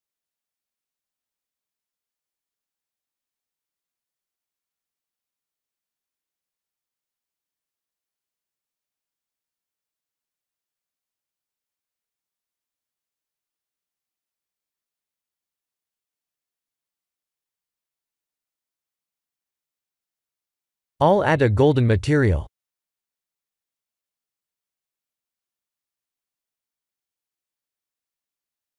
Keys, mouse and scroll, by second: 7.0 middle click, 8.1 middle click, 8.3 middle click, 12.2 middle click, 12.3 middle click, 12.9 KP_1, 14.1 Tab, 14.5 Tab, 15.0 shift+z, 15.7 shift+z, 16.1 click, 17.7 click, 20.2 click, 22.3 middle click, 23.1 middle click, 23.6 middle click, 23.7 middle click, 24.9 click, 27.3 click, 28.1 click.